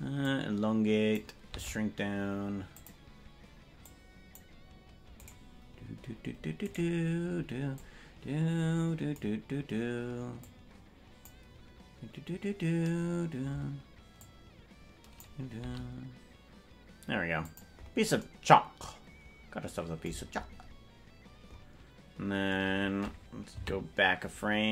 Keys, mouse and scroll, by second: 0.2-1.2 drag, 1.4 s, 3.8 click, 5.3-6.5 right drag, 7.7-9.2 drag, 7.7 right click, 10.3 click, 14.1-15.2 drag, 15.5 s.